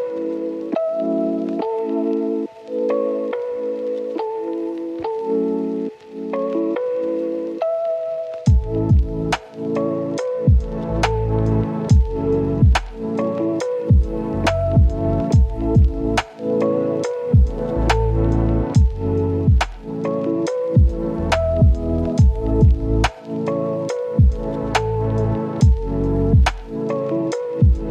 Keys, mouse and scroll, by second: 0.4-1.1 scroll up 2, 0.6 right click, 1.1 click, 1.5 scroll down 1, 1.6-1.9 scroll up 1, 1.9 click, 3.1 scroll down 1, 3.3-5.8 right drag, 5.8-6.6 scroll up 2, 6.0 right click, 6.6 right click, 6.9 scroll down 1, 7.0 scroll up 1, 7.1-8.8 right drag, 8.9 scroll up 1, 9.2 click, 9.6-9.9 scroll up 1, 9.9 click, 10.3 scroll down 1, 10.4 scroll up 1, 10.6 click, 11.6 right click, 12.6 scroll down 1, 12.7 scroll up 1, 12.7 right click, 13.8 scroll down 1, 13.9 scroll up 1, 14.0 right click, 14.4 scroll up 1, 14.6 right click, 15.0-15.5 scroll up 1, 15.5 click, 15.7 scroll down 1, 15.8-17.5 scroll up 1, 17.5 click, 17.8 right click, 18.6 click, 18.8 scroll down 1, 19.0-19.7 scroll up 1, 19.7 click, 19.9 scroll down 1, 20.0-21.5 scroll up 1, 21.5 click, 21.8 scroll down 1, 21.9-22.6 scroll up 1, 22.6 right click, 23.8-26.7 drag, 27.4-27.9 scroll up 1.